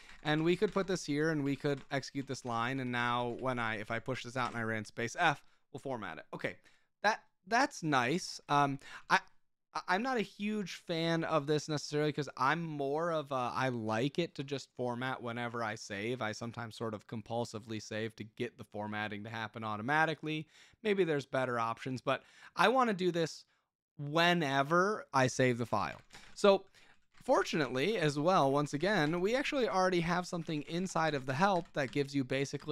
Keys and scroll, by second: 0.0-5.2 typing, 1.2 Escape, 8.3 Escape, 8.3-9.5 typing, 25.3 Escape, 25.3-32.3 typing.